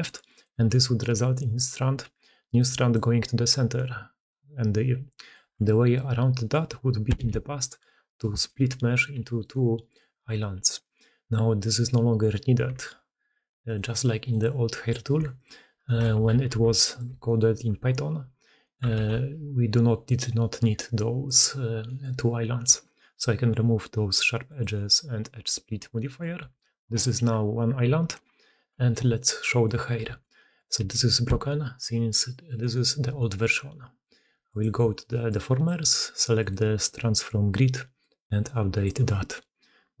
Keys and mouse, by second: 0.3 click, 1.4 d, 1.5-2.8 drag, 1.5-3.6 d, 2.9-3.6 middle drag, 5.2-7.7 middle drag, 5.2 d, 5.3 d, 6.6 Tab, 7.7 4, 9.0 g, 10.1 4, 10.5 g, 12.5 2, 15.3 shift+middle click, 16.0-17.1 ctrl+middle drag, 16.2 ctrl+z, 17.2-18.5 middle drag, 18.7 ctrl+click, 18.8 ctrl+e, 19.2-21.1 middle drag, 21.7 middle click, 22.7 alt+a, 26.3 Tab, 28.1 alt+h, 29.1-29.5 drag, 30.0 shift+drag, 30.2 click, 30.8 g, 34.4 click, 35.2 click, 37.8-39.0 drag, 39.0 middle click, 39.9-40.0 middle drag.